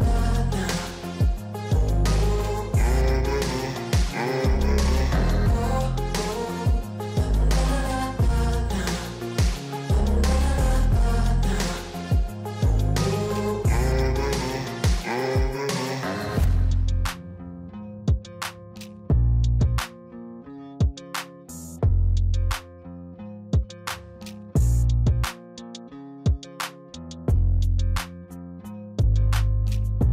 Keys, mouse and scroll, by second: 3.6 click, 8.7 click, 15.6 click, 18.5-20.6 middle drag, 20.6 click, 26.8 click, 27.8 click, 29.4 click.